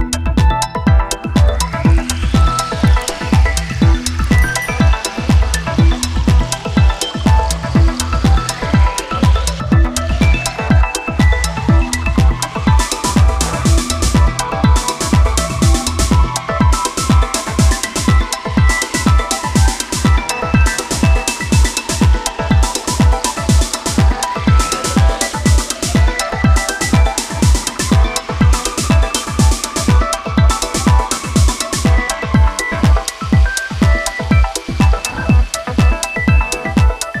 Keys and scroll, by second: 1.7 space, 17.5 space.